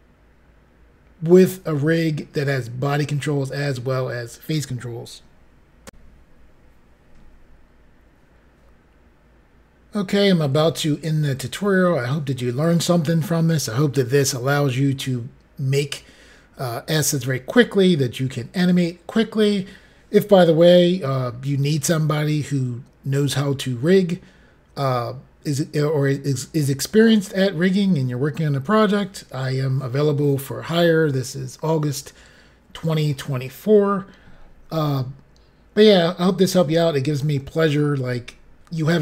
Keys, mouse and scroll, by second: 5.8 Pause, 5.9 Insert.